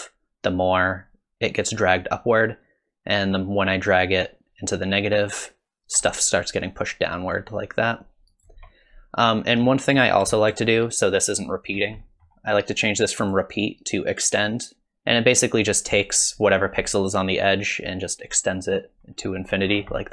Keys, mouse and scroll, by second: 7.4 shift+click, 9.6 middle click, 10.4 middle click, 11.8-13.2 scroll up 4, 12.0 middle click, 13.2 click, 19.7-20.1 scroll down 5, 20.0 middle click.